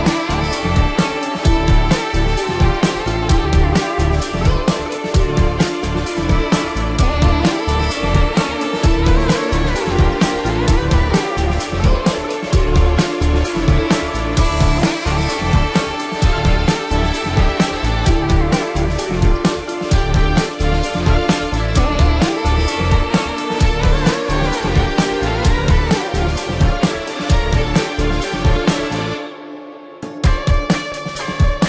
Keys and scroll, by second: 1.8 ], 2.1 ctrl+alt+z, 7.9 ctrl+=, 9.9 ctrl+-, 18.9 ctrl+=, 21.0 ctrl+-, 21.3 space, 22.6 ctrl+-, 23.2 ctrl+-, 23.8 ], 24.5 ].